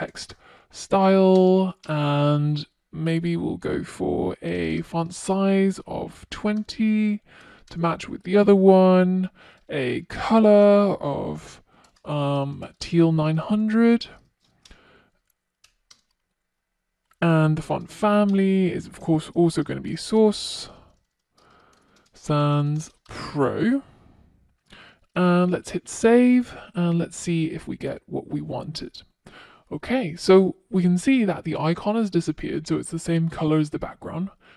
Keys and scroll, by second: 5.6 Return, 8.2 Return, 12.7 Return, 23.5 super+s.